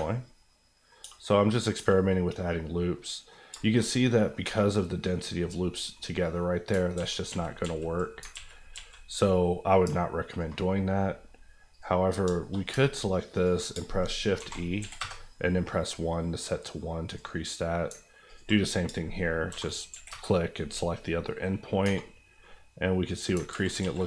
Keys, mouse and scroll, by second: 0.1 middle click, 1.0 Tab, 1.2 middle click, 1.7 Tab, 2.0-3.5 middle drag, 3.5 shift+middle click, 3.8 shift+scroll up 2, 4.1 middle click, 4.1 scroll down 1, 4.3 scroll up 1, 4.4 Tab, 5.9 middle click, 6.8 ctrl+middle click, 6.9 ctrl+z, 8.2 ctrl+z, 9.2 middle click, 9.8 alt+middle click, 10.3 alt+click, 12.1 scroll down 2, 12.4 shift+middle click, 12.8 ctrl+middle click, 13.3 ctrl+click, 13.7 shift+click, 14.3 shift+e, 14.8 KP_1, 14.9 KP_Enter, 15.7 scroll up 1, 15.8 middle click, 17.1 click, 17.9 ctrl+click, 18.6 click, 18.9 shift+click, 19.5 shift+e, 19.9 KP_1, 20.1 KP_Enter, 21.8 Tab, 22.1 scroll down 1, 22.4 middle click, 23.4 ctrl+middle click, 23.5 ctrl+z.